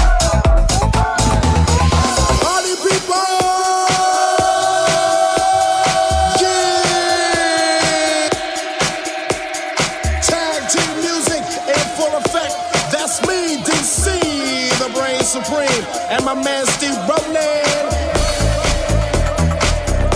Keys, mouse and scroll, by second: 0.8 alt+right click, 0.9-3.6 alt+middle drag, 3.6 right click, 3.6 3, 3.7 alt+middle click, 3.8 alt+z, 4.3 alt+z, 4.6 shift+right click, 4.6 shift+middle click, 4.8 shift+right click, 4.8 shift+middle click, 5.4 right click, 5.5 middle click, 5.9 right click, 5.9 middle click, 6.3 shift+right click, 6.4 shift+middle click, 6.6 shift+right click, 6.6-7.7 shift+middle drag, 7.7 alt+right click, 7.8 alt+middle click, 8.3 alt+right click, 8.3 alt+middle click, 8.6 alt+right click, 8.7-14.6 alt+middle drag, 9.3 alt+z, 11.9 alt+z, 13.8 alt+c, 14.6 click, 14.6 right click, 14.7-20.1 middle drag, 16.3 c, 16.4 c.